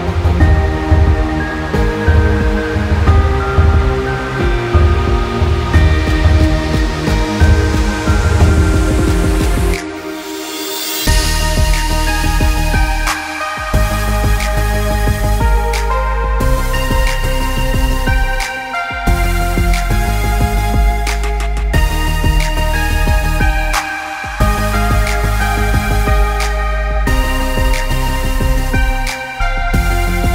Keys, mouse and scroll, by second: 0.9 click, 3.6 click, 3.9 middle click, 4.2 click, 4.5 middle click, 4.5-5.0 scroll up 1, 5.0 middle click, 5.4 s, 6.7 middle click, 7.2 g, 8.3-8.9 scroll up 1, 8.9 middle click, 9.1 s, 9.9 middle click, 11.1 g, 12.1 middle click, 12.5-13.1 scroll up 2, 12.7 middle click, 13.1-13.8 scroll down 1, 13.8 middle click, 14.9 middle click, 15.3 click, 17.1 middle click, 18.1 s, 20.1 g, 21.5 scroll down 2, 21.8 middle click, 22.1 middle click, 22.9 s, 23.6 middle click, 24.5 s, 25.7 middle click, 26.2 `, 27.1 middle click, 27.9 s, 28.8 middle click, 29.1-29.7 scroll down 3, 29.3 middle click, 29.7 middle click.